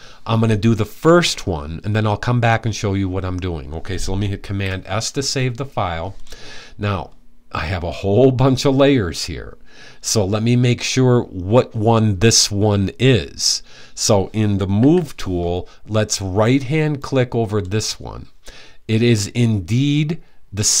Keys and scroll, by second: 4.1 super+s, 14.4 v.